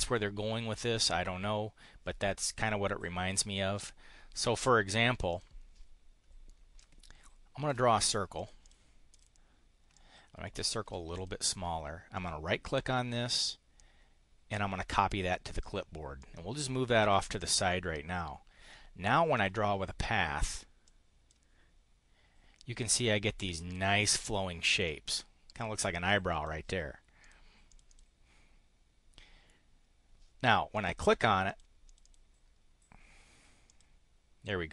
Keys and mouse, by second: 5.3 click, 6.8-7.8 ctrl+drag, 8.4 click, 9.1 click, 9.8-10.9 ctrl+drag, 11.1 click, 12.2 click, 15.0 click, 15.5 click, 16.1 click, 17.3 click, 19.4 click, 20.8 click, 24.0 click, 24.8 click, 26.0 click, 27.2 click, 27.7 click, 30.8 click, 31.4 click, 31.8 click, 33.7 click.